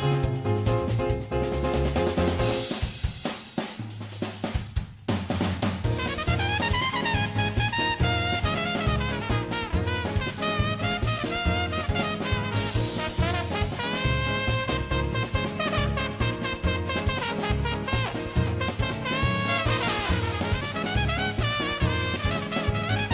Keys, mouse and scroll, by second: 1.6 middle click, 3.2 middle click, 3.4 KP_1, 3.9 middle click, 4.1 middle click, 4.1 a, 4.4 3, 4.4 alt+click, 4.9 middle click, 5.7 middle click, 5.7-8.1 typing, 6.2 middle click, 6.4 middle click, 6.6 middle click, 6.8 middle click, 7.0 right click, 7.0 middle click, 7.2 middle click, 7.8 click, 7.9 middle click, 8.1 middle click, 11.0 middle click, 11.4 middle click, 12.2 middle click, 12.5 g, 14.0 middle click, 14.1 middle click, 14.5 middle click, 14.9 middle click, 15.1 middle click, 16.3 middle click, 18.1 KP_1, 18.3 r, 18.8 middle click, 19.3 KP_1, 19.7 middle click, 20.3 ctrl+KP_1, 21.7 middle click, 22.1 KP_1.